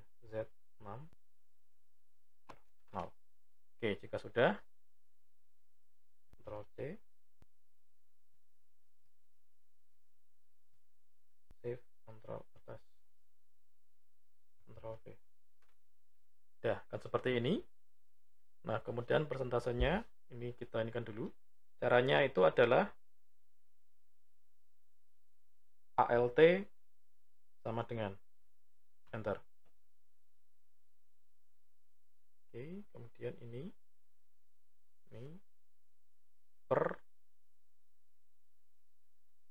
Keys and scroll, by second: 6.3 ctrl+c, 8.3 Left, 9.1 ctrl+Down, 10.1 Right, 10.8 Up, 11.5 ctrl+shift+Up, 14.6 ctrl+v, 25.8 alt+=.